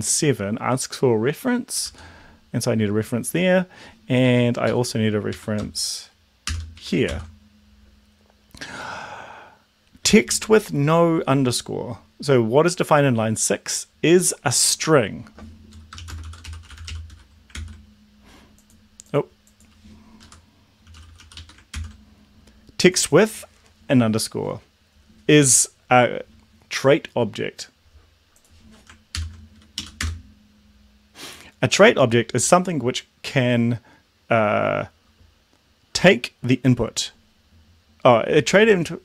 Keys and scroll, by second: 1.7 ctrl+s, 4.2 Right, 4.6 Left, 5.3 Right, 6.5 shift+7, 6.7 Right, 7.0 ctrl+s, 15.8-17.4 typing, 17.5 ctrl+s, 20.2 Left, 20.6-21.7 typing, 29.2 ctrl+l, 29.8 Up, 30.0 Return.